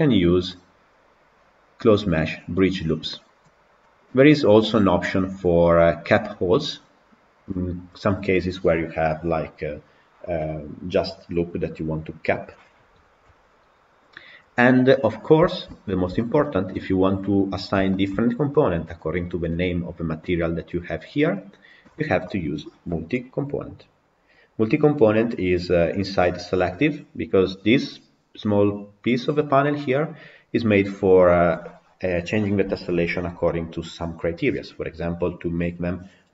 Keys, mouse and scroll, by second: 3.6 scroll down 1, 3.7-15.0 middle drag, 15.0-15.4 scroll down 5, 15.4-17.5 shift+middle drag, 17.5 scroll down 2, 17.8-19.0 shift+middle drag, 19.0 click, 20.0 click, 21.3 click.